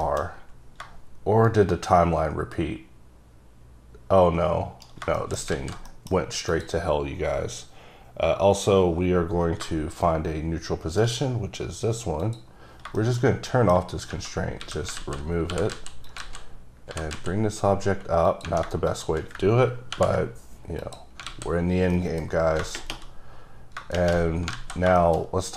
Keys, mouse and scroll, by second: 0.1-0.9 shift+scroll up 3, 1.9 shift+right click, 5.3 shift+middle click, 5.5 scroll up 1, 5.7 alt+z, 6.0 middle click, 6.6 click, 9.4 scroll down 2, 10.2 right click, 12.3 click, 13.1 middle click, 13.3-13.9 scroll up 3, 13.6 middle click, 14.6 scroll down 1, 14.7 a, 15.1 alt+z, 15.6 g, 15.9 z, 16.2 click, 16.6-17.0 scroll up 1, 17.0 g, 17.2 z, 18.4 click, 19.0 shift+click, 20.0 ctrl+p, 20.9 click, 21.4 alt+a, 21.8 scroll down 1, 22.0 middle click, 22.7 scroll up 1, 24.4 scroll down 3, 24.7 alt+z, 25.1 shift+middle click, 25.4-25.5 scroll up 1.